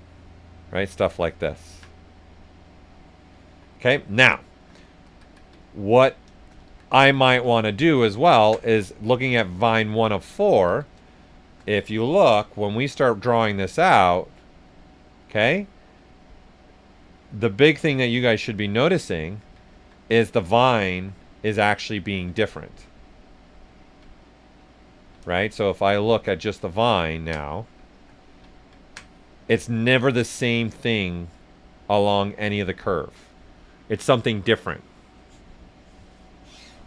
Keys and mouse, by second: 0.3 right click, 0.7 ctrl+right click, 1.6 alt+right click, 3.7 right click, 4.9 ctrl+z, 5.6 right click, 6.6 ctrl+z, 7.5 alt+right click, 8.0 ctrl+alt+right click, 8.9 click, 9.5 right click, 10.2 ctrl+right click, 10.6 ctrl+s, 10.9 ctrl+click, 12.0-13.3 drag, 13.3 right click, 14.1 right click, 15.4 click, 16.0 right click, 17.4 click, 18.2 right click, 20.1 right click, 21.1 right click, 22.6 right click, 25.4 ctrl+shift+click, 26.4 shift+right click, 27.3 right click, 31.3 right click.